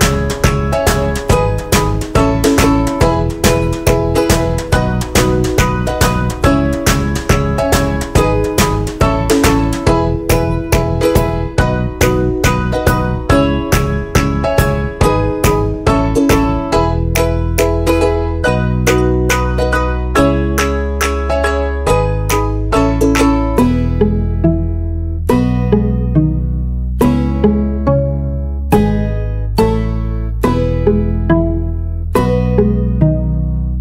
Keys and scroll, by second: 0.0 ctrl+KP_Add, 2.4 ctrl+-, 3.5 ctrl+KP_Add, 4.8 ctrl+shift+g, 10.4 ctrl+shift+g, 14.5 ctrl+shift+g, 19.5 ctrl+shift+g, 23.5 ctrl+shift+g, 28.2 ctrl+-.